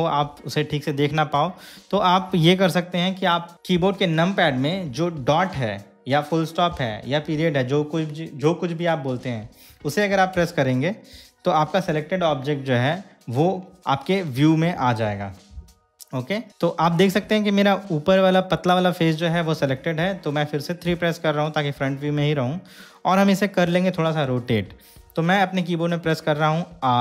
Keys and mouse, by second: 10.6 KP_Decimal, 16.5-18.8 middle drag, 21.0 KP_3.